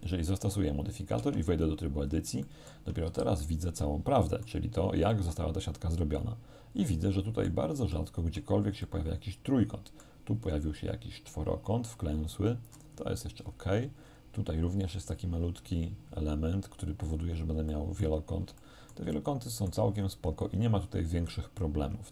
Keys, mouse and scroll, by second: 0.0 click, 1.2 Tab, 2.5 shift+middle click, 3.1 shift+z, 3.4-4.7 shift+middle drag, 5.2-7.7 middle drag, 8.0 shift+middle click, 8.9-10.2 shift+middle drag, 10.4-10.8 scroll down 1, 11.0 scroll down 1, 12.8-13.2 scroll down 1, 13.4-14.0 scroll down 1, 17.1-17.8 scroll down 1, 17.8 shift+click, 17.8 shift+middle click, 19.5 middle click.